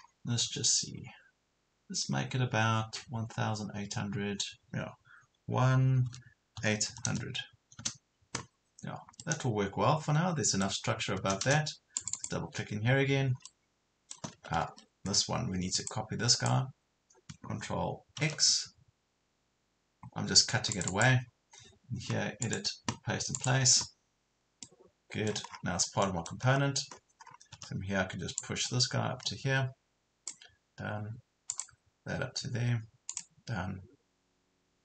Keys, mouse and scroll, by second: 0.0 scroll down 1, 6.1 KP_1, 6.6 KP_8, 7.0 KP_0, 9.2-11.4 middle drag, 11.4 scroll up 1, 12.0 click, 13.4 middle click, 14.7 ctrl+z, 15.8 click, 18.2 ctrl+x, 20.8 click, 24.6 middle click, 25.5 scroll down 1, 26.0 middle click, 26.4 scroll up 1, 27.6 scroll up 1, 28.4-30.4 drag.